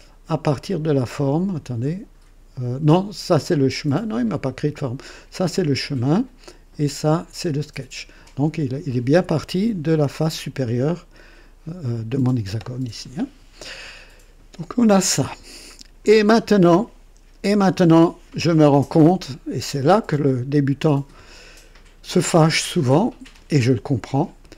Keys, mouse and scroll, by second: 0.7 click, 15.2-16.1 drag, 17.3 KP_2, 18.9-19.8 right drag, 20.4 scroll up 1, 21.4-22.2 right drag.